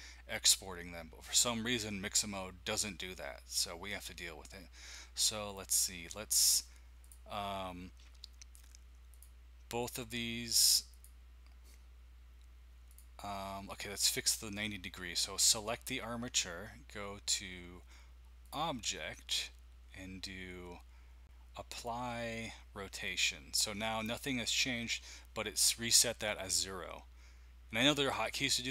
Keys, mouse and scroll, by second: 7.0-11.9 drag, 12.9 click, 18.4 click, 23.0 click.